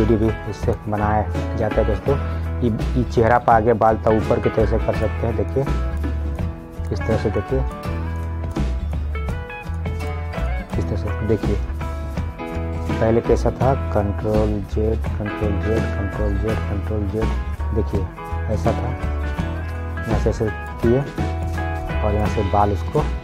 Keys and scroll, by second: 14.6 ctrl+z.